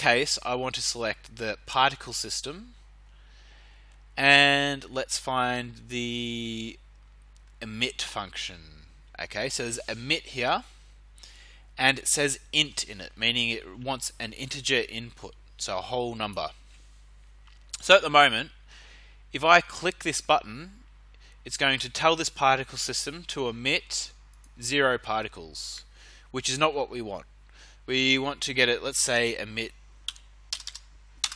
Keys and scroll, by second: 30.0 3, 30.5 0, 31.2 Return.